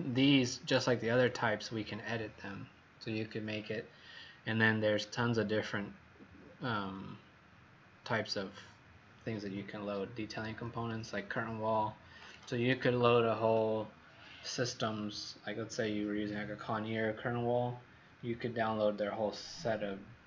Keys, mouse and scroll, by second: 4.8 click, 10.3 Escape, 11.0 Escape, 12.1 click, 13.4 Delete.